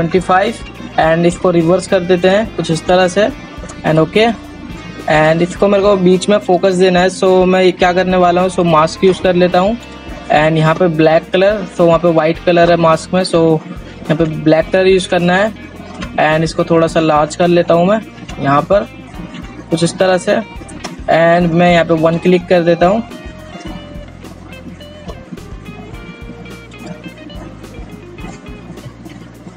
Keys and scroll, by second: 28.8 ctrl+z.